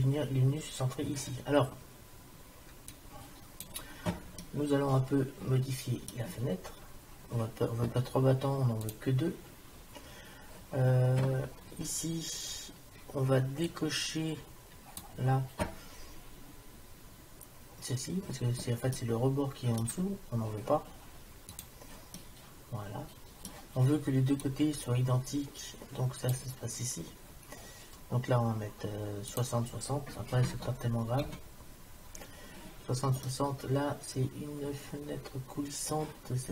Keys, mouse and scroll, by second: 2.9-4.7 drag, 4.5-6.5 middle drag, 6.6 middle click, 8.9 click, 13.7-15.2 drag, 19.0 middle click, 22.3 middle click, 22.9 click, 23.1 click, 25.6 click, 29.3-31.3 drag, 33.3-35.3 middle drag.